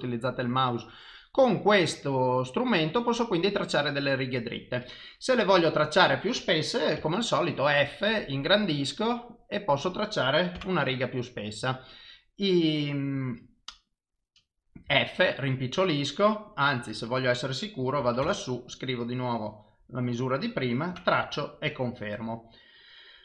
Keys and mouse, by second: 1.8 click, 7.0 f, 8.5 click, 14.9 f, 17.1 click, 19.2 click.